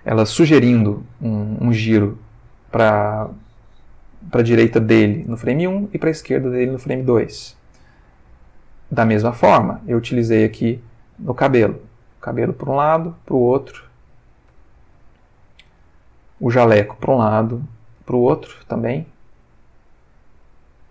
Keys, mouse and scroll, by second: 5.0-9.0 drag, 9.2 Tab, 9.7 click, 10.5 Tab, 11.7-14.4 drag, 14.5 Tab, 15.2-16.6 ctrl+middle drag, 16.8 shift+click, 18.1-18.7 ctrl+middle drag, 18.9 ctrl+Tab, 19.6 click, 20.3 Tab.